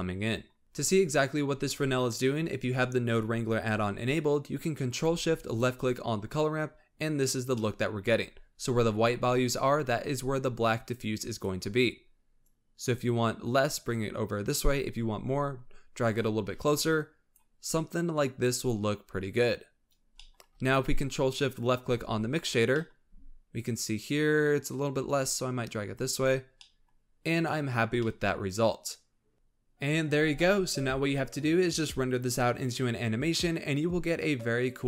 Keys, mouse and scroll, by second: 5.5 ctrl+shift+click, 7.5-10.6 middle drag, 10.6 click, 12.4-15.4 drag, 17.0-20.1 drag, 20.1 scroll down 1, 20.1-21.4 middle drag, 21.4 ctrl+shift+drag, 22.9 middle drag, 23.1 scroll up 2, 25.0-26.6 drag, 26.6-27.8 middle drag, 27.8 scroll down 1, 28.0-29.4 middle drag, 29.4 scroll down 5.